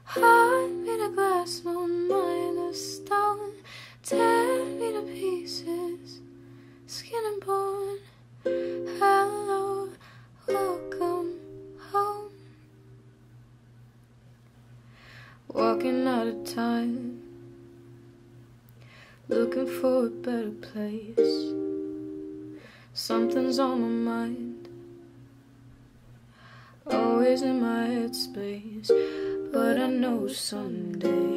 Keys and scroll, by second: 3.4 p, 4.9 s, 6.6 p, 11.4 p, 19.0 u, 27.6 F9.